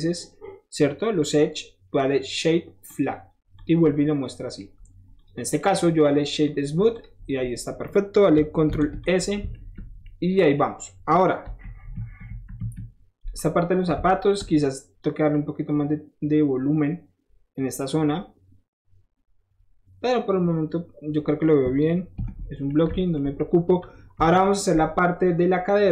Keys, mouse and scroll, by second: 2.9 click, 3.6 click, 3.9-4.6 scroll up 1, 4.8 scroll down 1, 5.2 click, 5.5 click, 6.5 click, 6.9 click, 7.2 middle click, 7.4-8.0 middle drag, 8.7 ctrl+s, 9.0 click, 9.4 ctrl+shift+s, 9.6 middle drag, 10.1-10.6 middle drag, 11.4 KP_1, 11.9 KP_3, 12.3 KP_1, 12.6 KP_3, 14.3-17.9 shift+middle drag, 21.5-22.7 middle drag, 22.2 ctrl+s, 22.9 ctrl+shift+s, 22.9 middle click, 24.2 KP_1, 25.4 middle click.